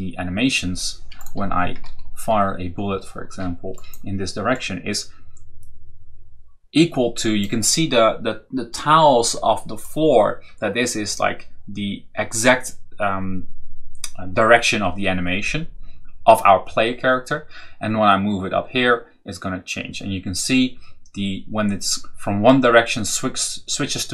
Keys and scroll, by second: 1.2 Left, 3.5 Left.